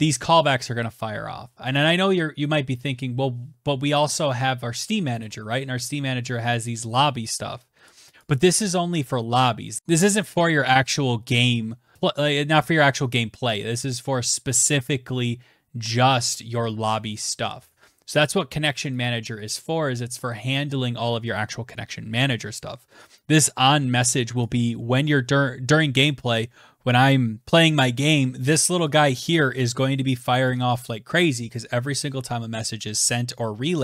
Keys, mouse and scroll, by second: 0.1 click, 1.2-2.0 scroll, 2.0-3.5 scroll, 3.5-4.1 scroll, 6.2 click, 6.5 click, 9.8 click, 14.6-15.6 scroll, 16.0 right click, 16.6 click, 17.4 click, 17.8 click, 22.7 click, 28.7 click.